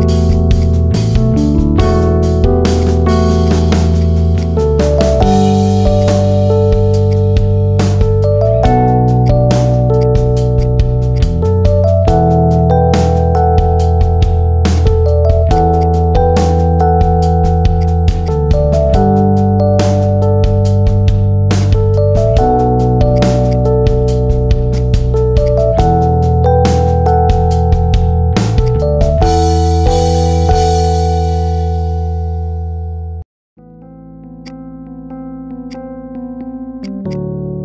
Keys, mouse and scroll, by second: 0.9-1.6 middle drag, 1.6 scroll up 3, 1.9-2.7 middle drag, 2.7 click, 3.3 drag, 4.5 middle click, 4.7 scroll down 2, 5.1 click, 5.9 click, 9.1 click, 9.5-9.9 middle drag, 9.9 drag, 10.1-10.5 middle drag, 10.5 click, 11.1 click, 11.2-12.7 middle drag, 14.7 click, 15.2 scroll down 3, 15.4 shift+click, 15.7 shift+click, 16.1-16.7 scroll up 2, 16.7 g, 18.2 click, 21.5 click, 21.9-22.3 scroll up 1, 22.3 middle click, 23.1-23.9 drag, 23.9 scroll up 2, 24.1 shift+middle click, 24.3 scroll down 3, 24.5 click, 24.9-25.3 middle drag, 25.3 click, 26.2 /, 26.7-27.5 middle drag, 27.5 Tab, 28.5 alt+shift+click, 28.9-30.5 middle drag, 30.5 alt+shift+click, 30.8-32.2 middle drag, 32.2 p, 32.7 middle click, 32.9 scroll down 2, 33.0 middle click, 33.5 Tab, 33.7-34.4 middle drag, 34.4 drag, 34.6-35.1 scroll up 1, 35.3 click, 36.7-37.6 drag.